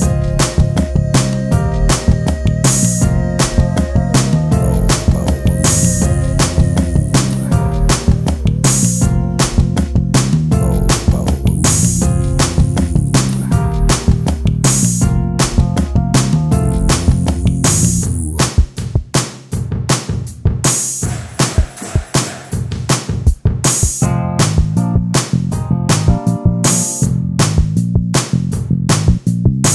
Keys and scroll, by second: 0.4 space, 6.5 e, 16.7 space.